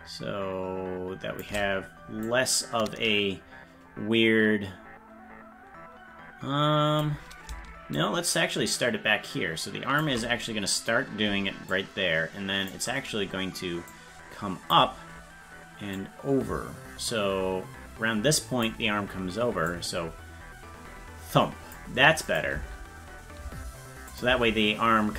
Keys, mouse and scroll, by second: 2.3-7.0 drag, 8.0-10.0 shift+drag, 11.7 click, 13.9 click, 15.9-18.6 drag, 19.7-21.7 drag, 22.3 click, 22.5 space, 24.1 click, 24.1 space, 24.3 space.